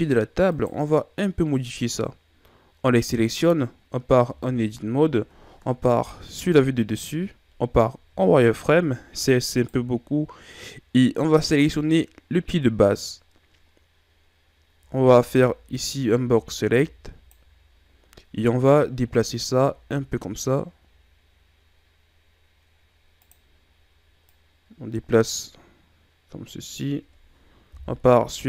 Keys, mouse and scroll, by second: 0.6 right click, 2.9-4.3 scroll up 2, 4.3 Tab, 6.4 KP_7, 8.1 z, 9.6 right click, 10.3-12.3 scroll up 2, 12.3-14.8 scroll up 1, 14.8 c, 16.3 b, 19.3 g, 24.3 click, 27.8 KP_1.